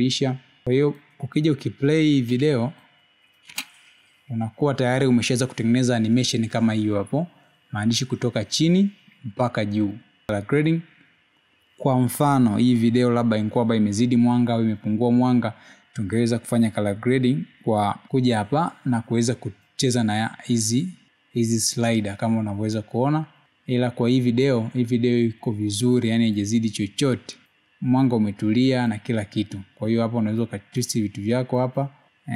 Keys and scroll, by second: 4.7 space.